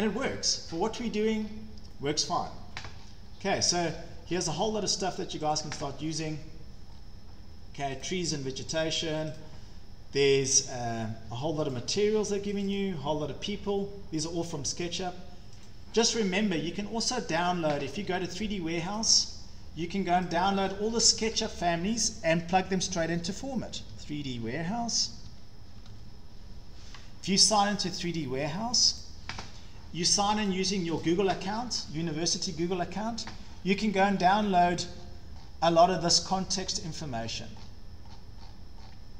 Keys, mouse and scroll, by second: 0.8 scroll, 0.8 scroll down 12, 1.4-1.8 scroll up 4, 2.5 scroll down 1, 2.8-5.0 scroll, 5.3 scroll down 15, 5.6 click, 6.4 scroll down 1, 7.1 scroll down 3, 8.1 click, 9.5 click, 10.3 click, 11.8 click, 12.6 click, 12.8 click, 15.7 click, 17.4 click, 17.9 Escape, 18.1 Escape, 19.0 click, 20.3 click, 23.2-26.4 typing, 29.0-30.5 drag, 31.1 click, 34.1-35.2 scroll down 16, 35.4-36.2 scroll up 13, 36.2 scroll, 37.3-38.0 scroll down 13, 38.0-38.6 scroll, 38.7 scroll down 8, 38.9 scroll, 39.1 scroll up 8.